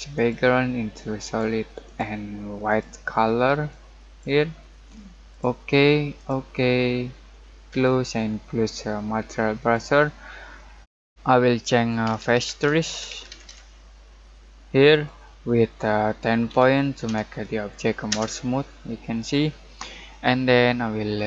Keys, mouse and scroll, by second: 10.7 middle click, 11.8-13.9 typing, 14.9 click, 16.4-17.0 typing, 18.1 Return, 21.1-21.2 scroll up 1.